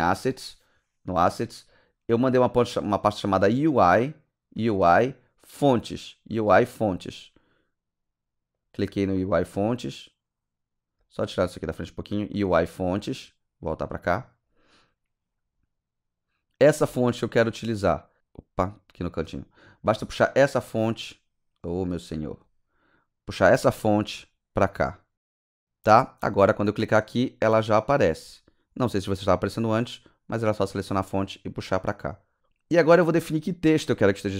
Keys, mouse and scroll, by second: 6.7 click, 8.6 click, 11.3 click, 12.2 click, 13.2-14.1 drag, 18.1 click, 18.5-18.9 scroll down 1, 19.9 click, 20.7 click, 22.3 click, 23.2 click, 25.4 scroll down 2, 25.4 scroll up 1, 27.0 click, 29.3 click.